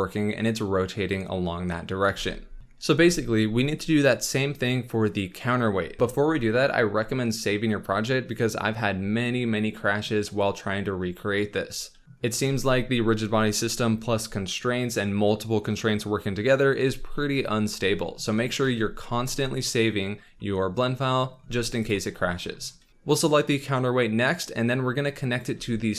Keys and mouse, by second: 2.1 space, 18.6 ctrl+s, 25.3 shift+click.